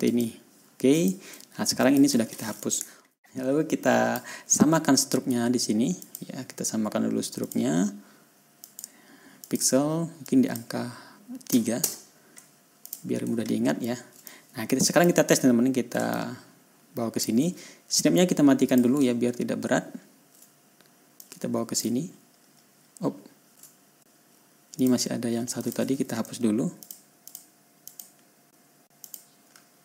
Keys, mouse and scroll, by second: 0.5 click, 1.4 click, 2.3 click, 3.9 click, 6.5 click, 7.9 click, 9.1 click, 9.9 click, 10.7 click, 12.2 KP_3, 12.6 Return, 13.3 click, 14.1 ctrl+scroll up 1, 14.7 ctrl+click, 16.6-17.8 ctrl+drag, 19.1 click, 19.5 ctrl+scroll down 2, 20.4 ctrl+scroll up 2, 21.7 click, 22.4 ctrl+scroll down 2, 22.7 ctrl+scroll up 2, 23.7-24.2 ctrl+scroll down 2, 25.2 ctrl+click, 26.0 ctrl+click, 27.3 click, 27.7 click, 28.3 click, 29.1 Delete, 29.5 click.